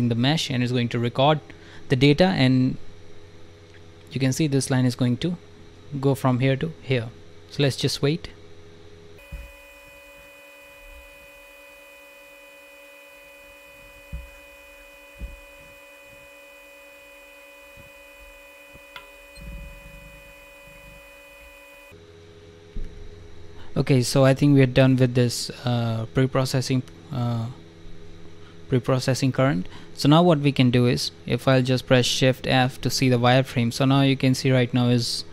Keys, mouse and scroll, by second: 23.4 scroll up 1, 24.1 alt+click, 24.6 click, 25.0 alt+click, 27.3 click, 30.4 click, 32.8 alt+click, 33.5 alt+click, 34.0 click.